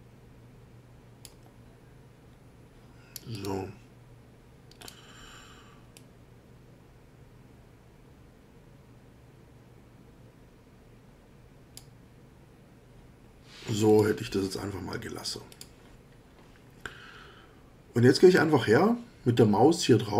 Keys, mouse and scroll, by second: 3.3 click, 4.8 click, 5.9-12.0 drag, 13.9 click, 15.5 click.